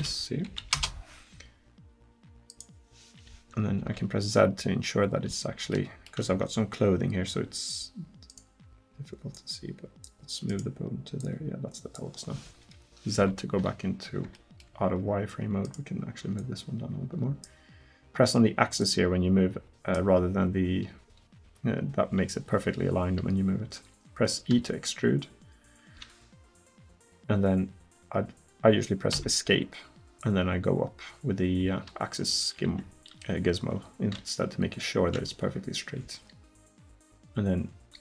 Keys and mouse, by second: 3.8 z, 7.8 middle click, 13.2 z, 16.4-17.4 right drag, 18.8-23.8 drag, 24.6 e, 30.2-32.5 drag.